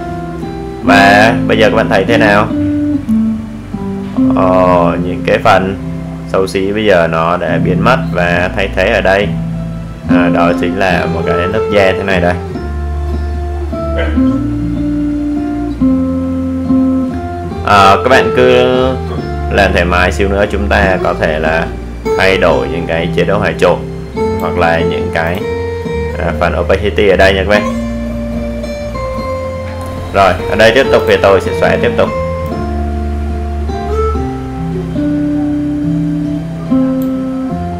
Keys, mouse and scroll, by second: 15.4 click, 20.6 click, 31.9 alt+right click, 33.0-33.4 alt+scroll up 1, 33.7 alt+right click, 34.7-37.7 drag.